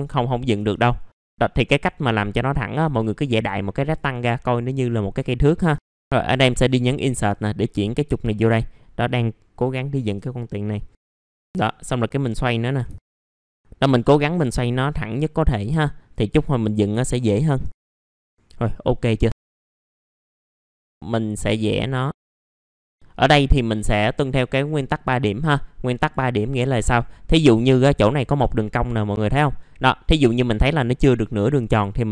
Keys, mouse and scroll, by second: 0.7 ctrl+right click, 1.2-3.0 drag, 3.0 right click, 3.8 click, 4.2-5.3 scroll up 1, 5.3 middle click, 5.9 Insert, 6.8-8.9 drag, 10.0 Insert, 10.6 middle click, 11.0-12.8 drag, 12.8 a, 15.1-15.4 scroll up 1, 15.5 w, 16.1-17.4 drag, 17.5 e, 17.8 click, 18.7 middle click, 19.3 click, 19.4 scroll down 1, 19.6 click, 19.9 middle click, 20.1 scroll up 1, 20.2 click, 20.4 ctrl+right click, 20.6 click, 20.8 scroll up 1, 20.9 middle click, 21.6 click, 22.9-23.4 scroll down 1, 23.8 middle click, 24.3 scroll up 1, 25.1 middle click, 26.7 scroll down 1, 27.0 middle click.